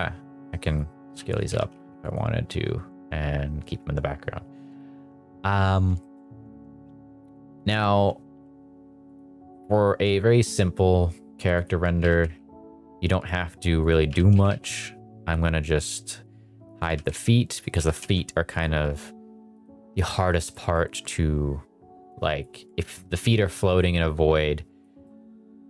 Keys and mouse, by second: 1.1 s, 1.3 click, 1.4 g, 1.7 z, 2.0 click, 5.9 shift+middle click, 6.5 ctrl+s, 8.3 h, 9.0 click, 11.6 click, 11.9 g, 12.2 z, 13.8 click, 14.0 g, 14.3 z, 14.4 z, 16.6 click, 16.8 g, 17.0 z, 17.6 click, 17.7 g, 17.9 x, 18.5 click, 19.5 click, 20.0 click, 20.4 middle drag, 22.3 click, 22.7 shift+middle drag, 23.8 click, 25.0-25.6 middle drag.